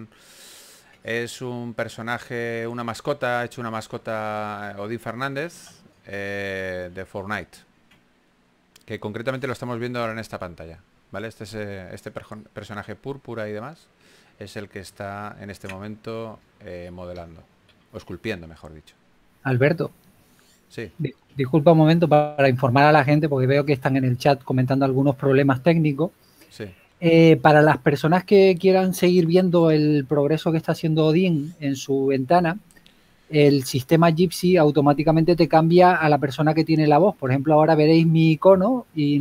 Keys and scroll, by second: 5.8 super+Tab, 7.2 super+Tab, 11.2 super+Tab, 18.4-19.8 typing, 22.0-23.8 typing, 30.9-32.0 typing, 36.5 s.